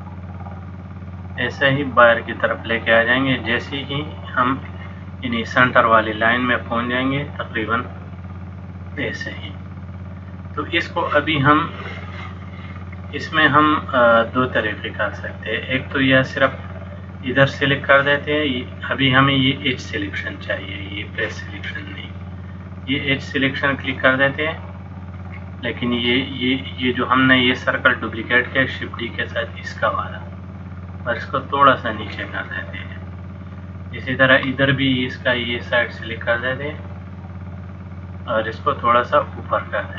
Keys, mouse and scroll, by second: 7.8 click, 9.5 middle click, 13.1 middle click, 16.4 click, 17.4 click, 19.8 click, 21.8 click, 22.9 click, 24.2 click, 25.2 click, 29.4 click, 32.6 middle click, 36.0 click, 36.9 middle click, 39.0 click.